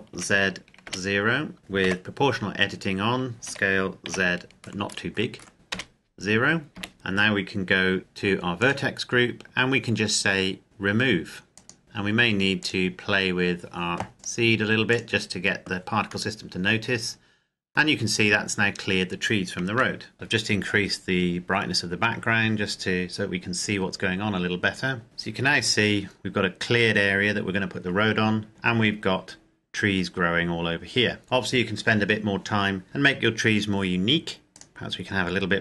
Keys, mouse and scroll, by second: 0.1 z, 0.9 KP_0, 1.6 Escape, 1.9 o, 3.5 s, 4.1 z, 4.4-5.8 scroll up 1, 5.8 KP_0, 6.8 KP_Enter, 8.9 click, 11.8 Tab, 12.7 click, 16.3 middle click, 19.6 KP_0, 25.0-26.8 scroll up 1, 34.5 right click, 34.7 click.